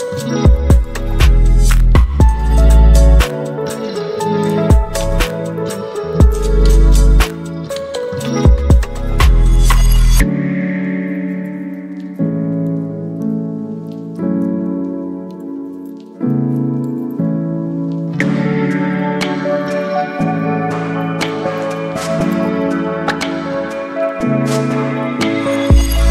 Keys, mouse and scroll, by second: 7.3 click, 17.6 click, 20.6 right click, 21.6-26.1 drag.